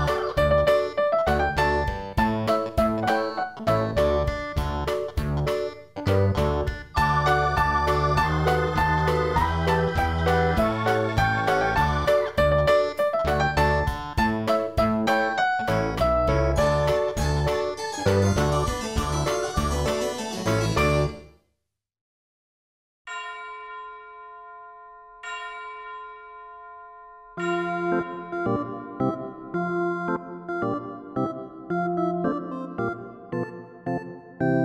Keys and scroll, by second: 4.7 ctrl+=, 12.7 ctrl+i.